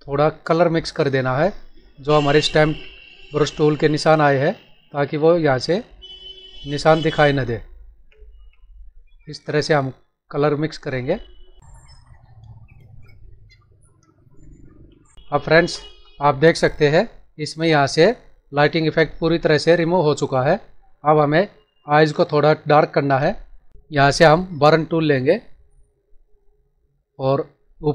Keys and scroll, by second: 15.3 ctrl+-, 20.5 ctrl+=, 22.1 space.